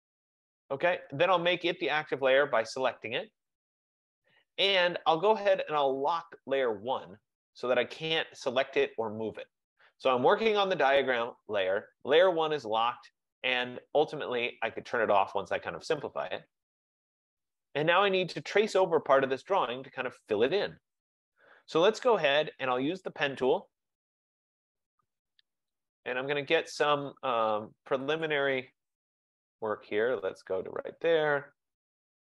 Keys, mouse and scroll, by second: 4.3 typing, 6.6 click, 8.6 click, 9.2 click, 15.1 click, 16.1 click, 17.8 click, 23.5 click, 25.9 click, 28.4 click, 30.9 click.